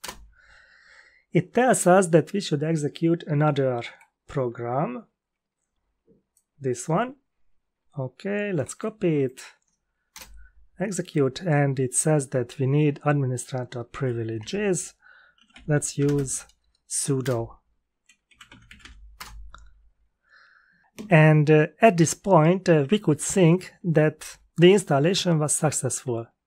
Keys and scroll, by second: 10.1 Return, 14.3 shift+Home, 15.1-16.4 typing, 17.2 Return, 18.0-19.3 typing.